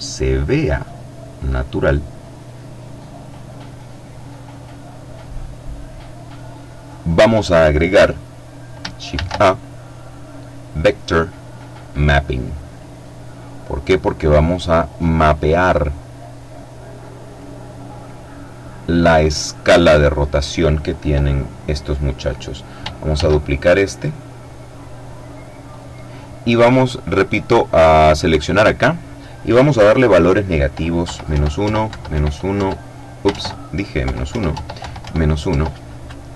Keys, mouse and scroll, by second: 8.4 shift+a, 11.1 click, 12.0-13.8 drag, 13.8 middle click, 15.4-17.0 drag, 22.4 shift+d, 24.9 click, 27.3 click, 30.2 KP_Subtract, 30.5 KP_1, 30.8 Tab, 31.0 KP_Subtract, 31.3 KP_4, 31.7 Tab, 32.5 shift+Tab, 33.2 KP_Subtract, 33.5 KP_1, 33.7 Tab, 34.0 KP_Subtract, 34.2 KP_1, 34.7 Tab.